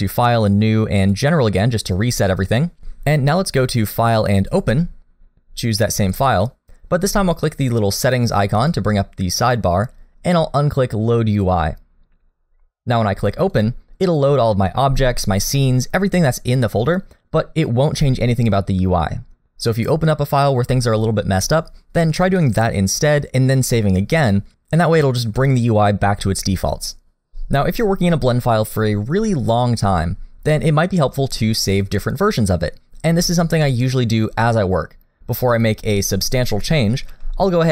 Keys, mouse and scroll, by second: 3.9 click, 28.1 middle click, 36.5 click, 37.1 s.